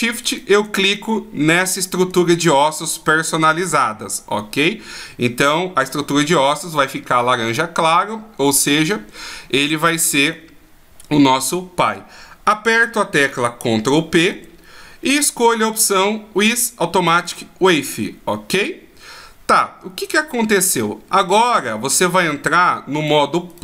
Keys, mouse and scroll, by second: 0.3 shift+right click, 2.3-3.5 shift+scroll down 1, 4.5-5.5 scroll down 1, 14.2 ctrl+p, 23.0 right click.